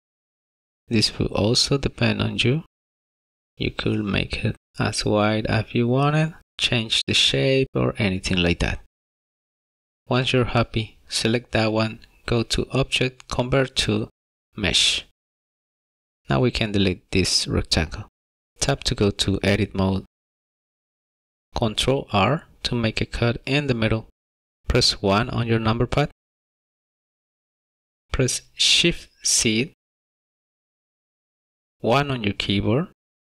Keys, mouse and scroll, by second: 5.1 s, 9.0 Tab, 11.1 click, 13.3 click, 17.0 click, 18.1 x, 18.5 click, 19.0 Tab, 19.6 shift+middle click, 20.3 middle click, 21.2 shift+middle click, 23.1 ctrl+r, 25.4 KP_1, 27.2 shift+middle click, 30.4 shift+z, 32.0 1.